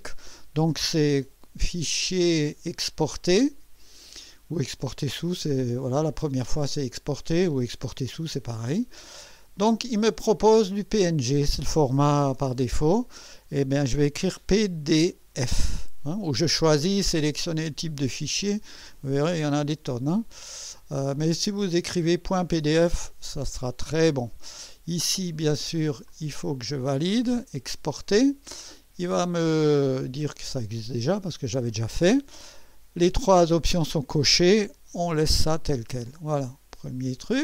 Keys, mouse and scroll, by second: 2.2 click, 7.6 click, 10.8 click, 12.4 BackSpace, 14.9 d, 15.4 f, 17.7 click, 18.8 click, 21.2 click, 26.1 click, 28.2 click, 31.1 click, 36.1 click.